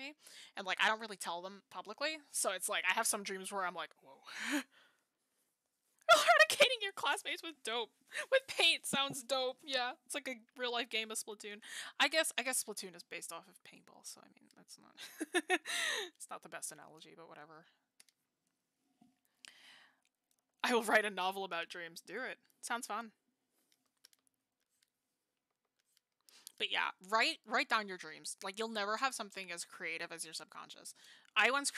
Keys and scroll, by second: 15.4 ctrl+z, 20.4 ctrl+z.